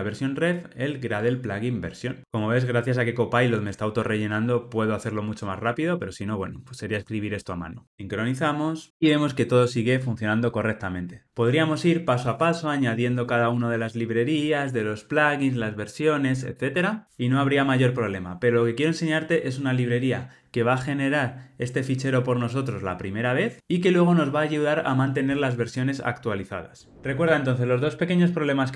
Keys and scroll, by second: 1.1 Tab.